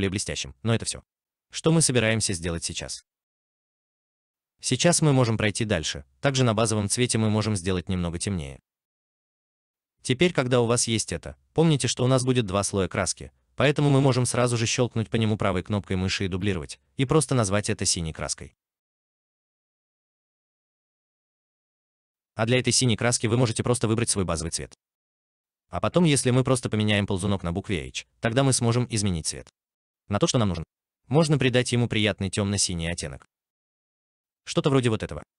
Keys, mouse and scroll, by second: 13.8 right click, 17.6 double click, 18.8 l, 18.8 shift+b, 19.2 e, 19.2 u, 20.3-20.8 typing, 21.0 Return, 35.2 alt+click.